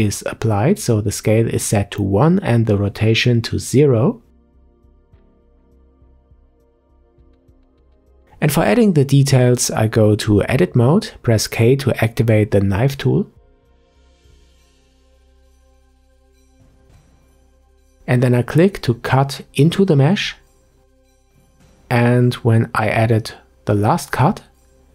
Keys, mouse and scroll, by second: 0.5 ctrl+a, 4.9 click, 5.5-6.2 middle drag, 6.2-7.6 scroll up 2, 7.6-8.1 middle drag, 8.1-8.7 scroll up 1, 8.7 Tab, 9.0 middle click, 9.6-10.9 scroll up 1, 10.9-14.1 drag, 19.4-24.9 middle drag.